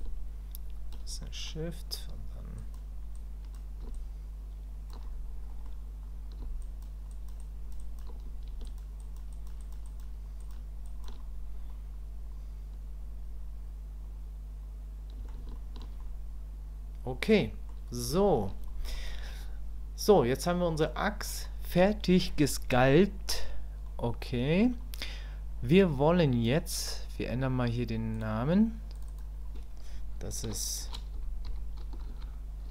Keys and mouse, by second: 0.0 shift+click, 1.2 middle click, 2.6 click, 3.2 click, 3.9 ctrl+click, 5.5 middle click, 6.6 ctrl+click, 7.1 ctrl+click, 7.4 ctrl+click, 7.8 ctrl+click, 8.6 shift+click, 9.0 shift+click, 9.3 shift+click, 9.6 shift+click, 9.8 shift+click, 10.4 shift+click, 10.8 shift+click, 11.7-15.3 middle drag, 15.6 shift+click, 16.0-17.7 middle drag, 18.2 shift+click, 18.7 middle click, 19.3-20.9 middle drag, 23.9 middle click, 28.2 click, 29.1-32.7 drag.